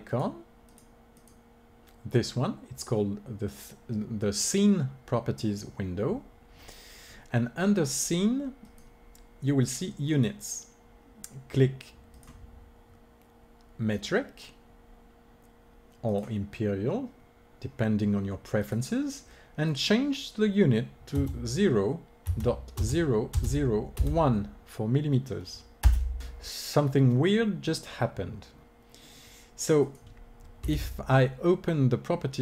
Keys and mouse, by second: 27.9 middle click, 29.7-31.6 drag, 30.6 n.